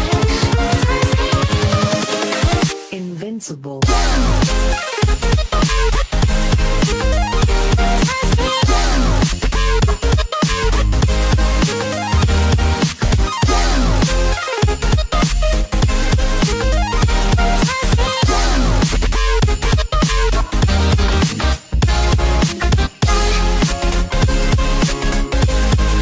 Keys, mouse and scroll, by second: 0.1 click, 11.3 click, 12.5 click, 18.4 click, 21.0 click, 22.1 click, 22.1 right click, 23.9 click, 24.5 scroll up 2, 25.6 click.